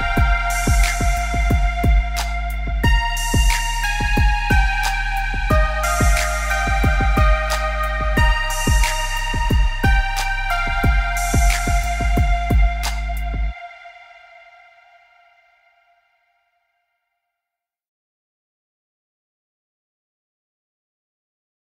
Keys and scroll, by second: 0.4 b, 3.9 Escape, 4.2 Escape, 11.4 b, 13.6 Escape, 13.7 Escape, 14.0 Escape.